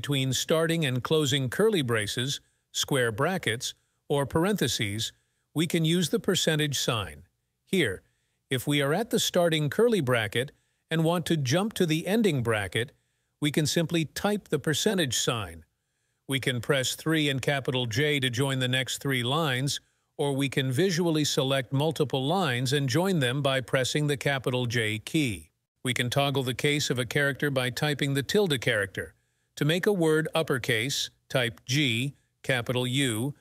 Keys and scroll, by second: 13.5 %, 16.4-17.1 typing, 20.5 j, 26.4 ~, 30.9-31.7 typing.